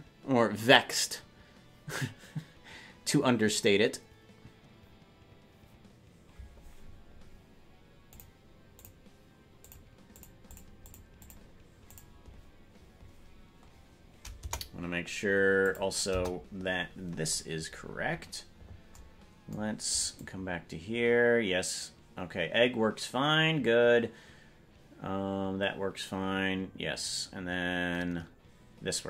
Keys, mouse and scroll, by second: 16.1 KP_0, 20.3-29.0 drag.